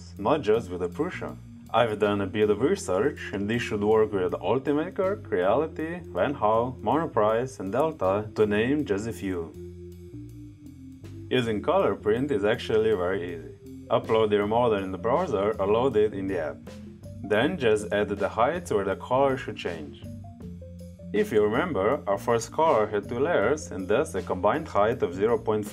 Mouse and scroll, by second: 2.4 click, 2.7 click, 15.7-18.1 drag, 25.5 click.